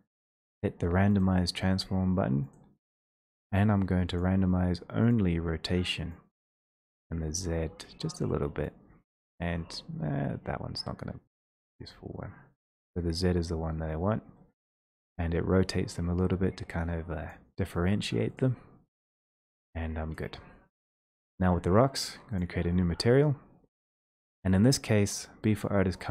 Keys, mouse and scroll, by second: 5.1 click, 7.8 click, 11.1 click, 17.3 click, 21.0 click, 21.0 w, 22.5 click, 23.8 click.